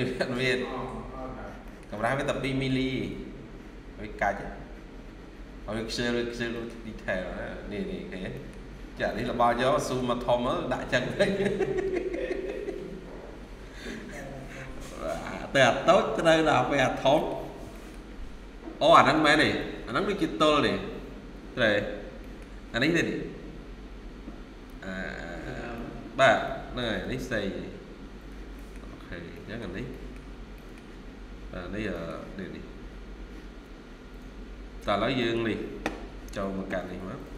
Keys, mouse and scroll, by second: 0.5-1.5 scroll down 1, 1.6 middle click, 6.0-6.4 scroll down 1, 6.4 middle click, 6.7 scroll down 1, 6.9-7.3 scroll up 1, 8.7 scroll down 1, 8.9 scroll up 1, 9.0 middle click, 9.4 scroll down 1, 9.7 middle click, 14.8-16.2 scroll up 1, 16.4-17.0 scroll down 1, 17.0 middle click, 17.5-18.0 scroll down 2, 17.6 middle click, 19.5 middle click, 20.8-21.3 scroll up 1, 21.4-22.2 scroll down 1, 22.2 middle click, 25.6 middle click, 26.8-27.8 scroll down 1, 28.4 middle click, 28.9 scroll down 1, 29.2 middle click, 30.6 scroll down 1, 30.8 scroll up 1, 30.9-31.4 scroll down 1, 31.8 middle click, 32.3 scroll up 1, 35.1 middle click, 35.6-36.2 scroll down 1.